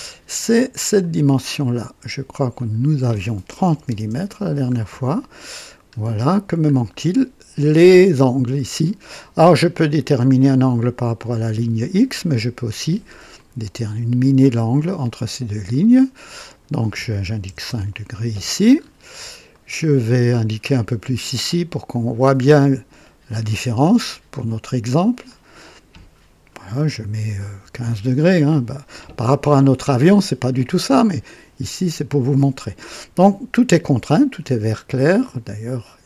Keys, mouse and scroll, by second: 0.9 click, 2.5 click, 3.7 KP_3, 3.9 KP_0, 4.1 Return, 5.5 scroll up 2, 6.4 scroll down 2, 10.2 click, 11.7 click, 13.3 click, 14.4 click, 16.4 click, 17.5 KP_5, 17.7 KP_Enter, 18.8 scroll up 2, 19.5 right click, 21.8 click, 23.2 click, 25.2 click, 27.5 KP_1, 27.7 KP_5, 28.1 Return, 29.2 typing, 30.0-30.6 scroll down 1, 30.7 right click.